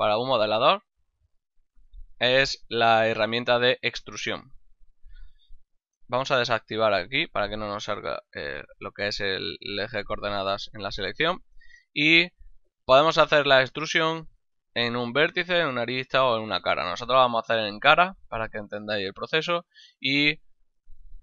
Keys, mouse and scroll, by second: 2.6 right click, 7.0 click, 16.8 ctrl+Tab, 17.4 click, 17.9 right click, 18.8 middle click.